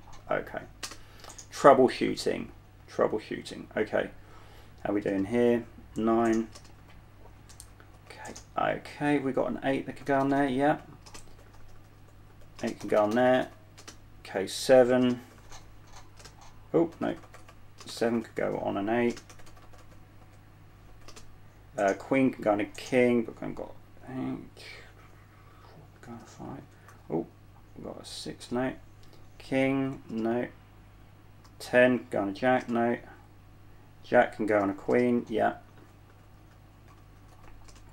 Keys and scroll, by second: 1.4 space, 5.4 typing, 6.5-8.9 typing, 10.2-14.1 typing, 15.2-21.4 typing, 25.3-27.7 typing, 28.7 space, 30.4 space, 31.7-33.6 typing, 34.9-37.9 typing.